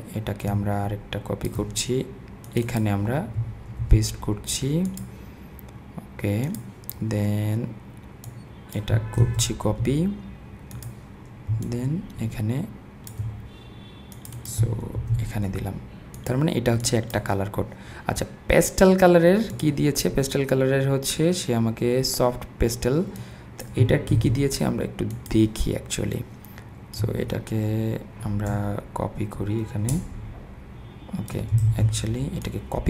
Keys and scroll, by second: 3.8 super+v, 9.2 super+c, 15.0 super+v, 24.2 super+c, 31.7 super+z.